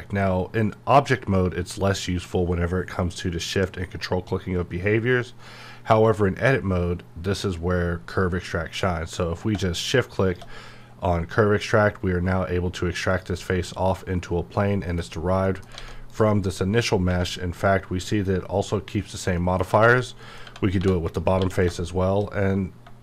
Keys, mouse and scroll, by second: 9.4 q, 9.9-13.0 shift+drag, 13.1 click, 14.6 middle click, 15.8 alt+a, 16.0 click, 19.3 middle click, 19.9 click, 20.2 middle click, 20.4 Tab, 21.1 click, 21.3 q.